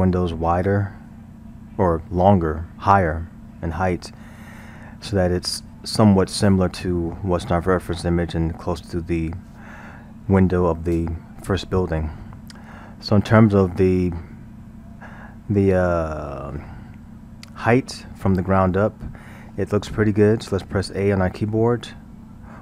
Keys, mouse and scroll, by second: 12.8-15.8 middle drag, 21.4 a, 22.4 KP_1.